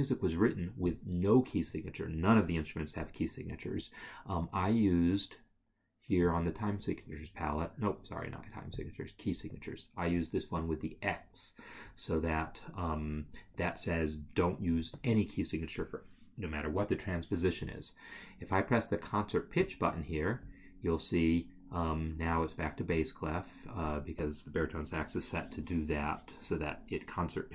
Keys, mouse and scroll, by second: 0.8 click.